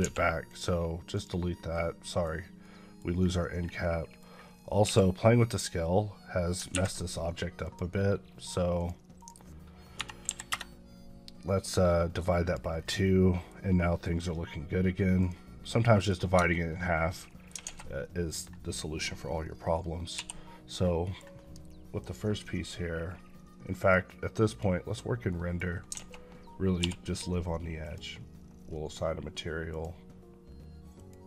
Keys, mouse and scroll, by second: 0.3 click, 1.4 KP_Decimal, 1.9 middle click, 2.5 middle click, 3.0 scroll up 1, 3.7 middle click, 4.1 scroll up 2, 4.7 q, 7.5 click, 9.8 KP_Divide, 10.1 KP_2, 10.3 KP_Enter, 12.3 click, 12.6 scroll down 2, 12.9 middle click, 13.6 middle click, 14.1-15.0 scroll down 1, 15.0 click, 15.6 middle click, 17.0 Tab, 17.1 middle click, 17.6 a, 17.9 middle click, 20.0 l, 20.9 middle click, 21.9 click, 24.0 click, 25.1 middle click, 26.0 a, 27.7 click.